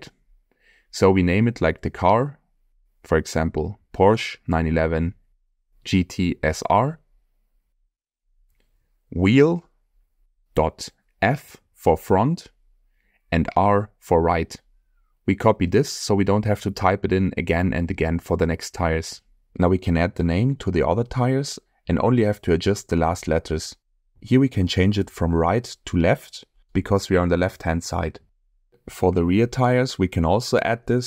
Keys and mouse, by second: 2.6-15.4 drag, 17.1-17.8 middle drag, 18.4-18.8 shift+middle drag, 20.3 click, 21.0-25.3 ctrl+drag, 26.6-27.3 middle drag, 27.6-28.4 shift+middle drag, 30.4-31.0 drag.